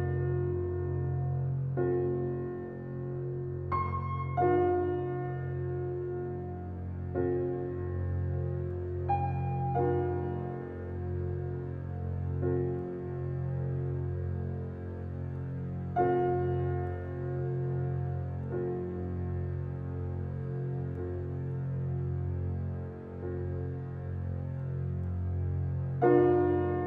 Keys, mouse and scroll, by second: 2.3 click, 6.7 BackSpace, 7.4 click, 19.9 scroll down 1, 20.4 click, 22.8 click, 25.0 alt+right click, 26.4 ctrl+1.